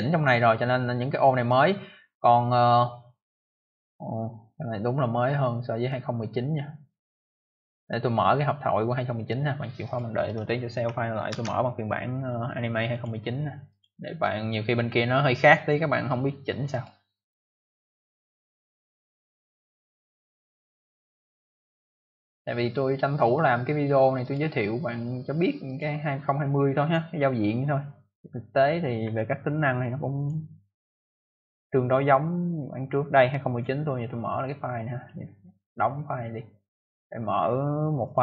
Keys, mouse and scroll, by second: 9.8 click, 11.2 ctrl+s, 12.8 click, 13.6 click, 16.6 click, 24.1 click, 25.6 click, 30.1 click, 31.2 click, 32.5 click, 33.4 click, 33.5 click, 34.9 click, 36.5 click, 38.0 click.